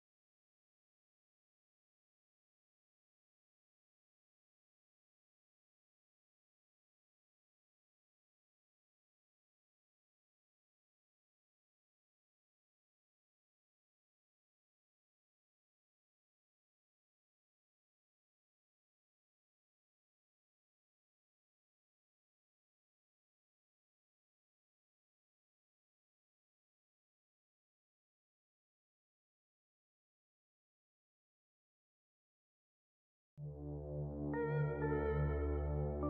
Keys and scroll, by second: 10.6 ctrl+r, 29.9 shift+Page_Down.